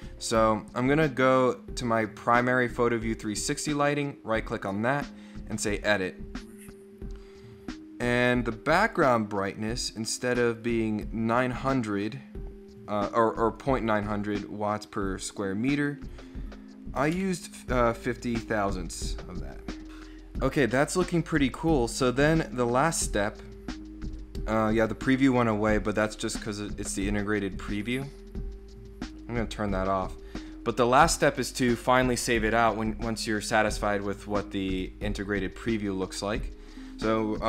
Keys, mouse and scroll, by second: 3.5 right click, 5.5 click, 8.4-8.9 drag, 11.9-13.6 drag, 13.9 click, 15.2 click, 19.5 click, 22.2 click, 26.4 click.